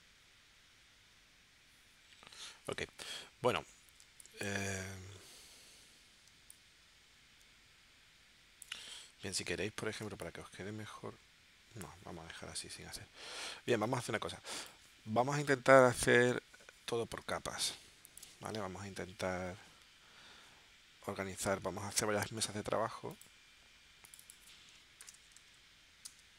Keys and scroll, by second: 4.0 space, 6.3 space, 10.1 space, 13.7 space, 17.2 space, 24.7-26.3 typing.